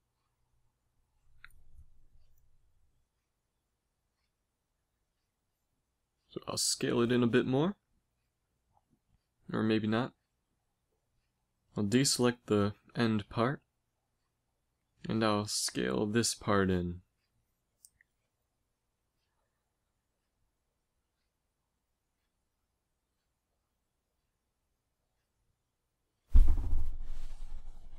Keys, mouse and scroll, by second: 1.5 a, 1.9 Tab, 3.9 Tab, 4.3 a, 5.4 s, 9.5 z, 10.0 b, 10.6 b, 13.2 b, 15.1 z, 16.2 s, 27.1 a.